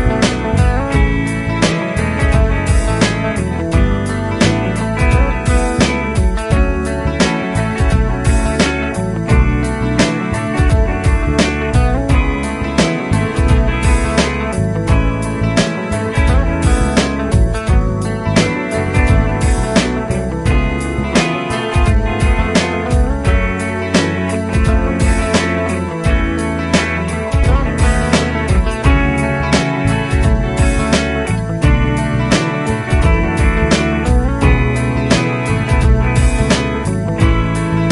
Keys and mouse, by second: 3.9 right click, 17.1 double click, 20.0 ctrl+Up, 31.5 right click.